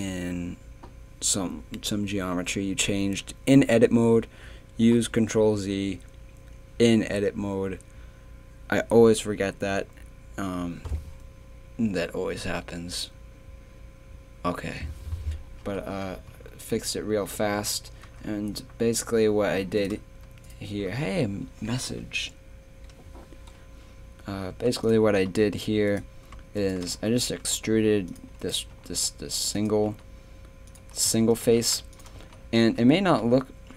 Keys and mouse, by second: 15.6 KP_3, 19.8-24.5 right drag, 24.5 x, 25.2 middle click, 25.9-26.9 right drag, 26.9 e, 28.4-29.6 right drag, 29.9 g, 31.1 z, 31.9 g, 32.2 z, 32.6 Tab.